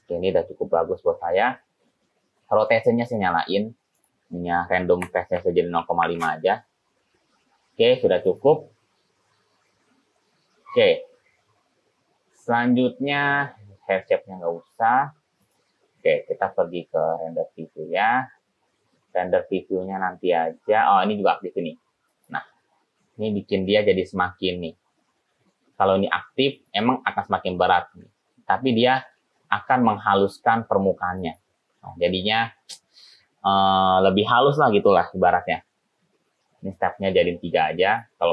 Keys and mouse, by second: 2.7 click, 3.1 click, 4.1-7.2 drag, 8.5 click, 13.3 right click, 15.5 right click, 17.1 right click, 22.2 click, 22.4 middle click, 31.3 click, 32.5 middle click.